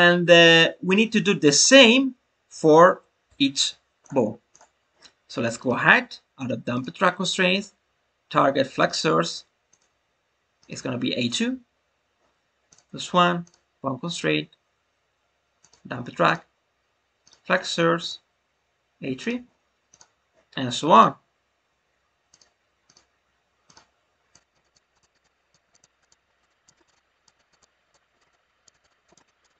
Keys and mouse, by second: 4.4 click, 5.5-6.7 drag, 7.6-8.8 drag, 9.7 click, 13.4-15.6 drag, 16.3 click, 17.9-19.2 drag, 19.9 click, 21.0-22.3 drag, 22.9 click, 24.2 click, 24.7 click, 25.0 click, 25.2 click, 25.7 drag, 26.1 click, 26.5 click, 26.9 click, 27.4 click, 27.6 click, 28.3-28.7 drag, 28.7 click, 28.9 click, 29.3 click, 29.5 click.